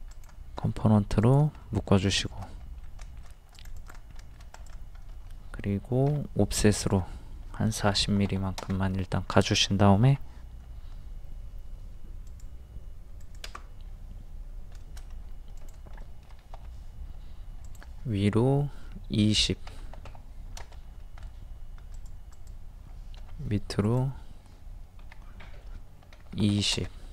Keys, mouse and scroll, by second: 0.1 click, 1.6 middle click, 2.3 shift+middle click, 3.0 shift+middle click, 3.6 click, 4.2 middle click, 6.1 o, 6.9 click, 7.9 KP_4, 8.0 KP_0, 10.1 i, 12.3 click, 14.8 shift+middle click, 15.1-15.5 scroll up 1, 15.6 click, 16.0 middle click, 17.6 ctrl+click, 19.7 KP_2, 19.8 KP_0, 20.8-21.2 scroll up 1, 21.9 click, 23.2 typing, 25.0 Up, 26.2 KP_2.